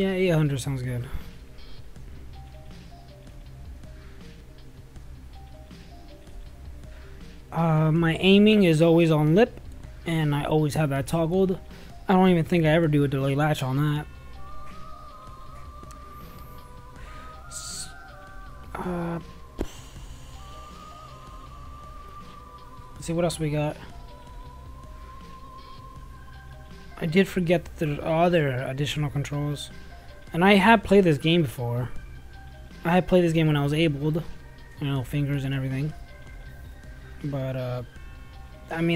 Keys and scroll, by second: 2.1-4.7 typing.